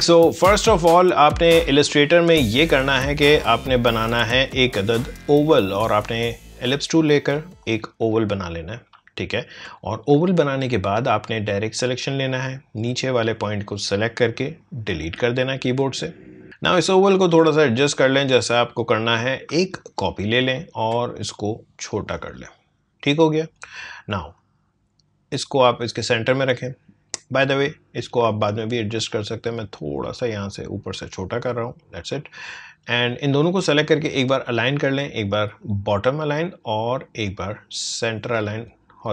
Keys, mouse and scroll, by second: 2.0-9.0 drag, 9.0-9.6 alt+scroll up 1, 10.4-14.9 drag, 14.9 Delete, 16.4 ctrl+z, 17.2-19.8 drag, 19.8-35.4 alt+drag, 35.6 click, 38.5 click.